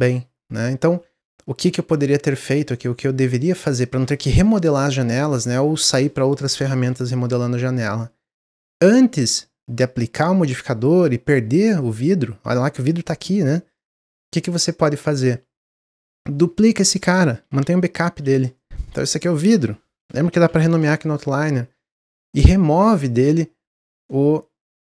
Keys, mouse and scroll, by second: 0.1 ctrl+z, 0.5 ctrl+z, 0.8 ctrl+z, 1.1 ctrl+z, 1.4 ctrl+z, 1.6 ctrl+z, 1.8 ctrl+z, 2.0 ctrl+z, 2.2 ctrl+z, 2.4 ctrl+z, 2.6 ctrl+z, 2.9 ctrl+z, 3.2 ctrl+z, 3.8 ctrl+z, 7.4 click, 11.6 click, 12.3 click, 12.8 click, 13.7 click, 16.5 click, 17.4 shift+d, 18.5 scroll down 1, 19.1 click, 19.3-22.5 drag, 22.9-24.9 drag.